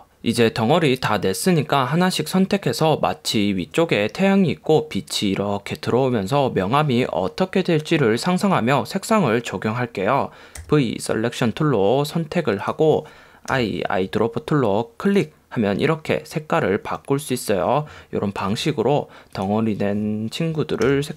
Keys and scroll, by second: 10.7 v, 13.6 i, 18.6 v, 21.0 i.